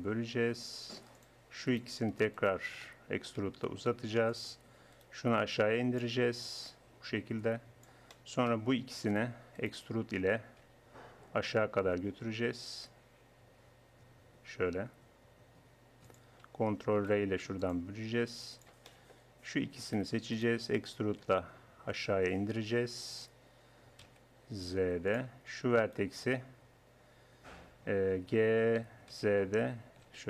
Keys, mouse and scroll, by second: 1.7-2.8 drag, 2.8-4.0 right drag, 3.4 e, 4.9-8.1 drag, 5.6-6.8 right drag, 8.1 middle click, 9.1-11.4 drag, 10.6 e, 17.0 ctrl+r, 19.9 click, 20.5-21.9 middle drag, 21.3 e, 21.9 right click, 25.9-28.3 right drag, 28.3 g.